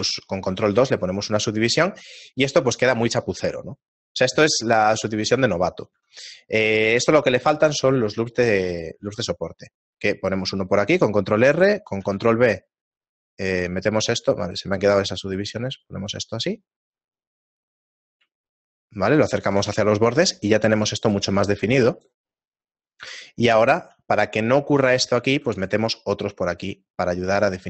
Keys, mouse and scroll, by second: 1.0 ctrl+2, 5.0 shift+middle click, 5.6 middle click, 6.2 Tab, 7.8 middle click, 7.8 scroll up 2, 9.2 ctrl+r, 12.8 ctrl+b, 12.8 middle click, 19.7 Tab, 20.5-21.7 scroll down 1, 21.7 right click, 22.0 click, 22.7 middle click, 23.3 Tab, 24.0 shift+middle click, 24.4 scroll up 3, 26.3 ctrl+r.